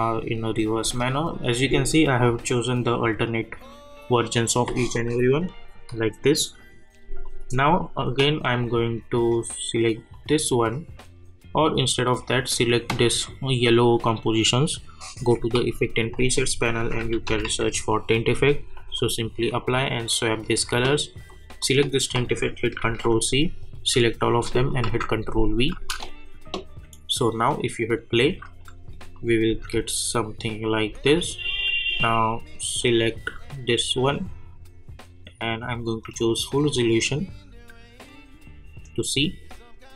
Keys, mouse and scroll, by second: 0.8 space, 7.2 click, 10.1 click, 12.4 click, 15.1 click, 15.5 ctrl+a, 16.5-17.9 typing, 18.7 click, 22.8 ctrl+c, 23.6 click, 24.3 shift+click, 24.8 ctrl+v, 25.7 space, 28.2 space, 28.6 click, 29.5 space, 31.3 click, 33.8 click, 36.1 click.